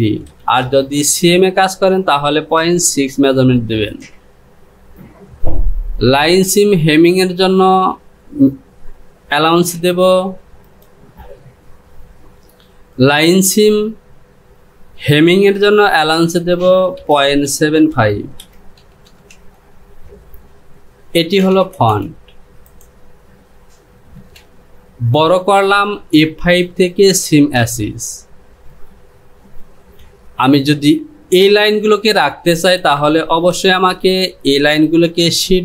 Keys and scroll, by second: 16.2 Down, 24.3 Home, 29.9 ctrl+z, 30.0 j, 33.6 Home.